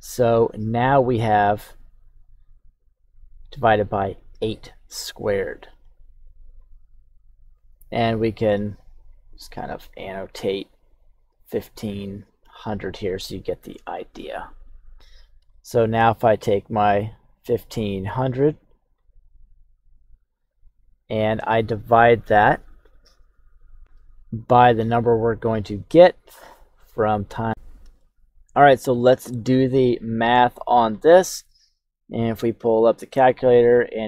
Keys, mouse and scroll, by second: 1.6 click, 2.8 click, 4.5 shift+middle click, 5.8 click, 7.5-8.2 scroll up 2, 8.5 click, 9.0 click, 9.7 click, 10.3 click, 10.8 click, 11.7 click, 15.5 shift+middle click, 16.4 click, 16.9 click, 17.6 click, 18.0 click, 19.3 click, 24.8 click, 26.5 click, 27.0 click, 27.4 click, 27.5-27.8 scroll up 3, 27.9 shift+middle click.